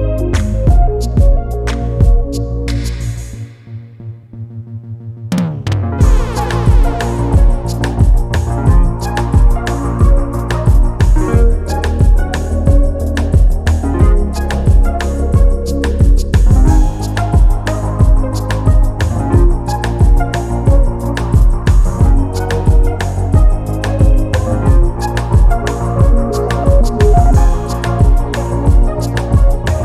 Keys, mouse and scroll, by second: 0.1 click, 2.8 click, 3.6 space, 4.2 click, 5.3 ctrl+d, 6.2 ctrl+shift+click, 7.6 ctrl+-, 8.8-9.5 ctrl+scroll down 4, 9.8 ctrl+click, 11.4 click, 12.1 space, 14.1 click, 15.7 shift+click, 17.7 ctrl+d, 18.8 ctrl+KP_Add, 20.3 ctrl+d, 20.9 ctrl+click, 22.8 ctrl+shift+click, 23.9 ctrl+shift+KP_Subtract, 26.0 click, 27.4 click, 27.9 click, 28.9 KP_2, 29.1 KP_0, 29.3 KP_Enter.